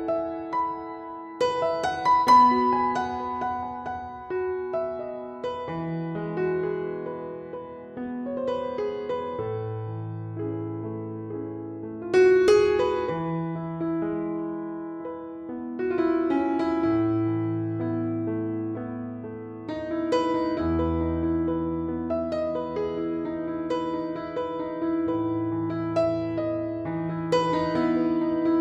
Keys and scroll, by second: 4.9 =, 5.7 =, 6.8 typing, 8.8-9.7 typing, 10.9 typing, 28.4 0.